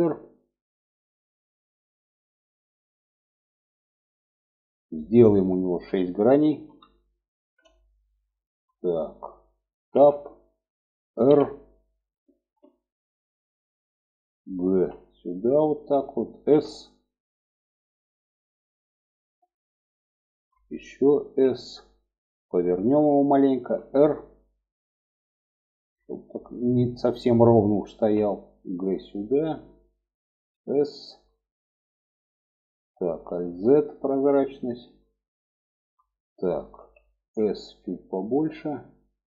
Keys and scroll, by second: 9.3 Tab, 10.6 r, 14.1 g, 15.9 s, 20.6 s, 23.0 r, 27.3 g, 29.8 s, 32.6 alt+z, 36.5 s.